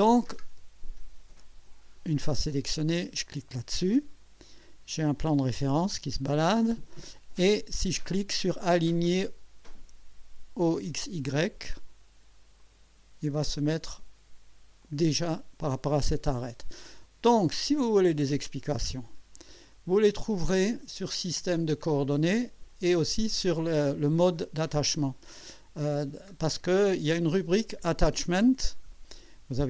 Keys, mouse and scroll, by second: 3.0 click, 12.6 click, 14.8 click, 19.7 click, 23.0 click, 24.2-25.4 scroll down 6, 26.1-26.9 scroll up 4, 27.3-28.4 scroll down 4, 28.6-28.9 scroll up 2.